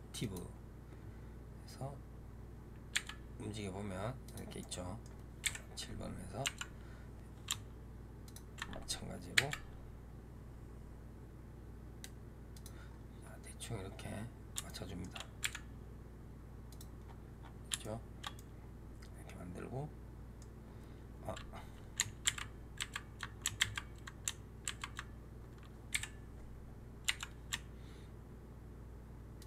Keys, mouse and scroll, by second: 2.8 g, 4.5-5.3 middle drag, 5.3 KP_7, 6.3 r, 9.2 g, 12.7-13.8 scroll up 2, 13.8-14.5 scroll up 8, 14.5 shift+middle click, 15.3 g, 16.9-17.7 scroll down 9, 17.7-22.2 shift+middle drag, 22.2 ctrl+x, 24.6 ctrl+z, 25.8 KP_7, 26.9 r.